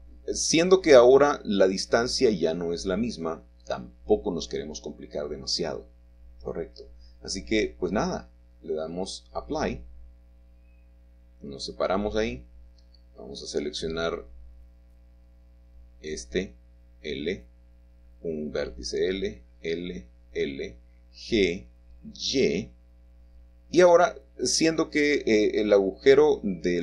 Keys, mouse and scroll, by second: 3.2 shift+middle click, 3.5-4.5 shift+scroll down 2, 5.2 middle click, 5.7-6.1 scroll up 1, 6.4-7.9 shift+middle drag, 8.7-9.8 drag, 10.5-12.1 drag, 12.2 Tab, 13.7 a, 16.8-17.9 drag, 18.0 l, 20.5 l, 23.0 g, 25.8 click.